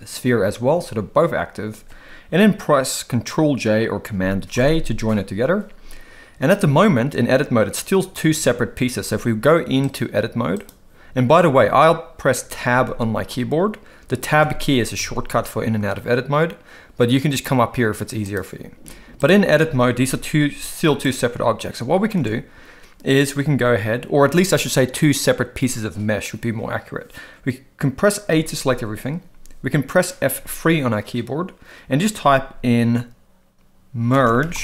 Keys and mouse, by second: 4.5 ctrl+j, 8.3 Tab, 8.9 Tab, 9.9-10.7 drag, 12.8 Tab, 14.4 Tab, 15.0 Tab, 17.4-18.4 drag, 20.0 ctrl+l, 20.4 g, 22.2 alt+a, 28.2 a, 30.4 F3.